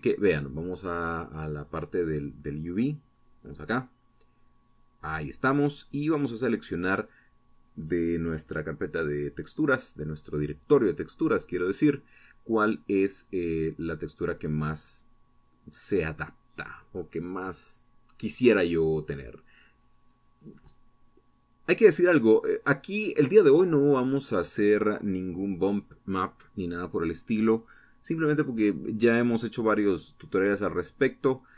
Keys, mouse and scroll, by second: 0.8 click, 1.9 click, 4.7 click, 6.3 click, 7.5 click, 10.7-11.5 scroll down 2, 11.9-12.3 scroll down 2, 13.5-15.1 scroll down 6, 20.3 click, 28.6-29.7 scroll up 3, 30.1-31.1 scroll up 4.